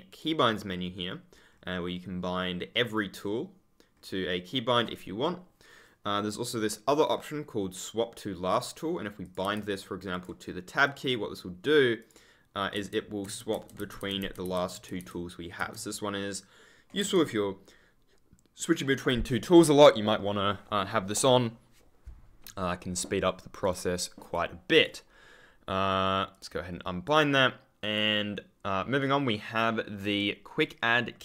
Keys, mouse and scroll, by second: 0.5-0.9 scroll down 1, 1.2-1.9 scroll up 1, 2.6-3.0 scroll down 1, 8.4 click, 9.4 Tab, 10.0 click, 11.9 click, 12.7 Tab, 16.9 Tab, 23.5 click, 26.2 click.